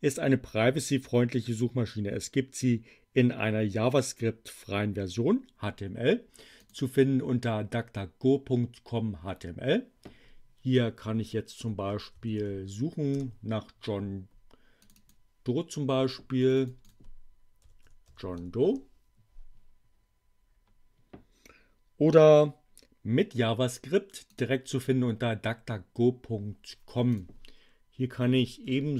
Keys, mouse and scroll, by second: 6.6 click, 11.0-12.8 typing, 13.1 Return, 14.6 click, 16.4 click, 17.3-18.8 typing, 24.2 click, 26.9 click, 27.8-28.9 typing.